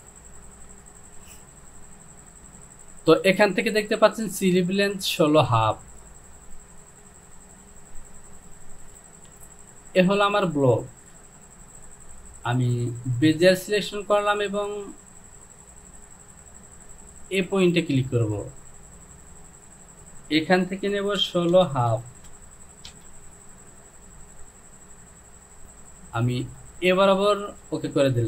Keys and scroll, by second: 9.2 Home, 21.3 KP_1, 21.6 KP_6, 22.0 KP_Decimal, 22.3 KP_5, 22.9 Return.